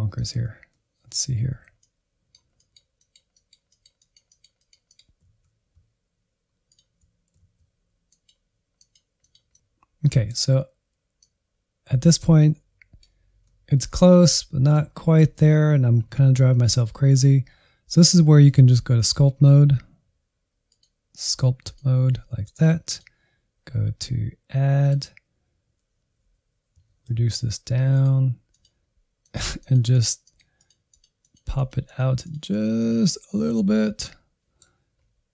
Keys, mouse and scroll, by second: 0.4 ctrl+click, 0.7 middle click, 1.4 alt+z, 1.8-3.6 drag, 3.6 alt+z, 4.4 ctrl+click, 4.6 alt+z, 4.9-7.2 drag, 7.2 middle click, 7.4 click, 8.0 scroll down 2, 8.0 middle click, 8.7 click, 9.5-11.2 middle drag, 11.2-13.4 drag, 13.4-16.4 middle drag, 16.6-26.8 drag, 26.8 shift+f, 28.4-33.7 drag, 33.7-35.3 middle drag.